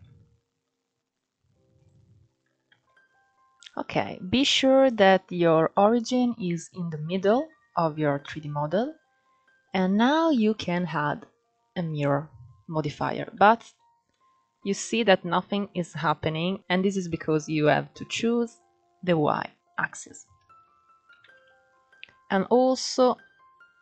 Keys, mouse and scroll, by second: 2.4 Tab, 2.8-3.7 scroll up 4, 3.7 shift+middle click, 3.9 scroll up 4, 4.6-6.1 shift+middle drag, 6.1-7.6 scroll down 7, 9.4-12.5 drag, 13.1-13.6 middle drag, 13.6 scroll down 5, 13.8-14.3 middle drag, 14.3-15.9 scroll up 2, 15.9 KP_3, 16.5 scroll up 1, 16.6 click, 18.7 click, 20.8 alt+z, 22.8-23.8 drag.